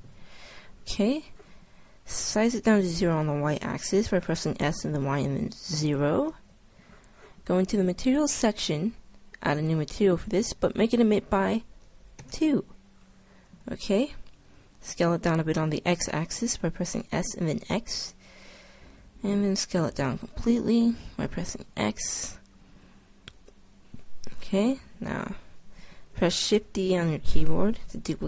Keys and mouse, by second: 4.4 s, 7.8-12.9 drag, 13.0 middle click, 13.9 middle click, 14.5 s, 18.2 click, 19.1 s, 23.6-25.3 drag, 25.3-27.0 middle drag, 26.6 shift+d.